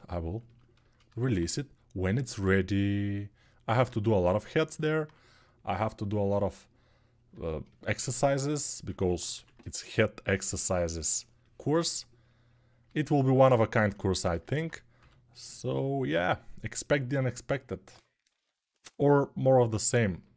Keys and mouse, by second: 9.1 1, 14.7 g, 18.1 6, 20.2 1.